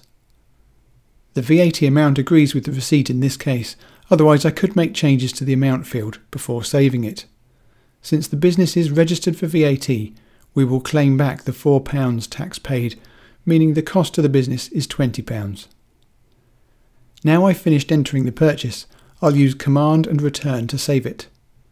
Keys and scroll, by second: 0.5 Down, 1.9 Return, 20.2 super+Return.